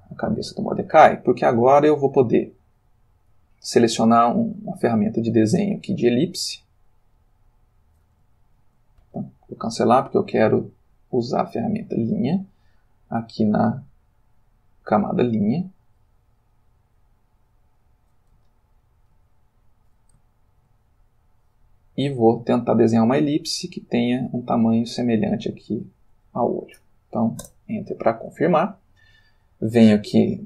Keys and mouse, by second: 0.2 click, 4.0 click, 6.6-8.2 drag, 8.4 ctrl+z, 9.0 ctrl+Escape, 11.1 click, 11.9 click, 13.3 click, 15.9-18.0 drag, 18.5 ctrl+middle click, 20.5 ctrl+z, 21.3-22.8 drag, 23.6-26.0 drag, 27.4 Return, 28.6 ctrl+middle click, 30.2 click.